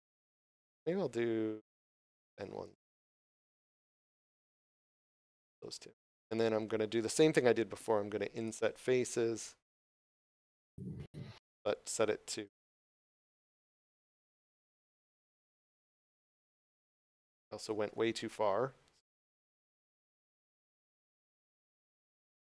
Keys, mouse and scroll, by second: 3.4 middle click, 5.0 scroll down 1, 5.4 middle click, 8.3 click, 12.1 scroll up 1, 12.6 shift+middle click, 14.8 click, 16.0 ctrl+middle click, 17.1 shift+middle click, 18.9 click.